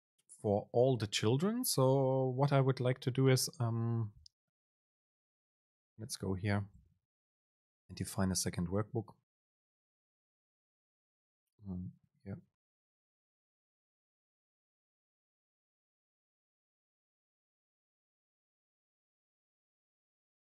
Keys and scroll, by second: 8.4 End, 10.5 Return, 11.6 BackSpace, 13.0 Return, 13.3 super+space, 20.1 BackSpace.